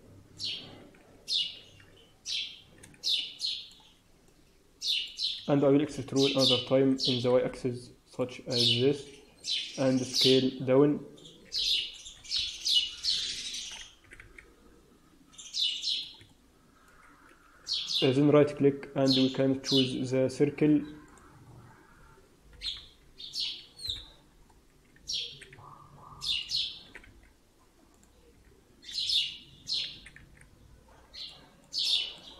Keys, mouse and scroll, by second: 0.9 shift+z, 1.8-2.4 shift+scroll down 2, 1.8 shift+z, 2.4 shift+z, 3.1 middle click, 3.8 scroll down 2, 4.2 alt+middle click, 5.9 e, 8.3-9.8 scroll down 6, 9.1-9.8 scroll up 1, 9.8-11.9 scroll up 1, 9.8 s, 12.4 KP_7, 12.9-13.3 scroll up 3, 13.3 shift+middle click, 13.9 s, 16.2 middle click, 17.9 right click, 22.5 KP_7, 23.7 KP_1, 24.5 scroll up 2, 25.2 s, 26.7 s, 28.3 s, 29.8 s, 31.5 middle click.